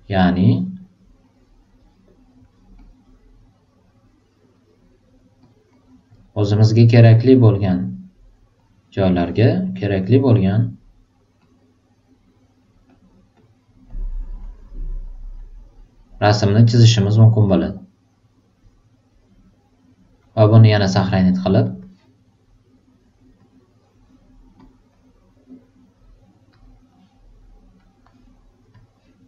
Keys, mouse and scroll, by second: 1.2 click, 2.4 super+click, 2.7 super+click, 3.9-5.1 super+drag, 5.4 super+click, 6.7 super+click, 8.6 super+click, 10.4 super+click, 11.4 super+click, 12.2 click, 12.9 super+click, 13.3 super+click, 13.9 super+click, 15.4 super+click, 17.6 super+click, 21.7 click, 23.4 click, 24.6 click, 26.5 click, 27.8 click, 28.7 click.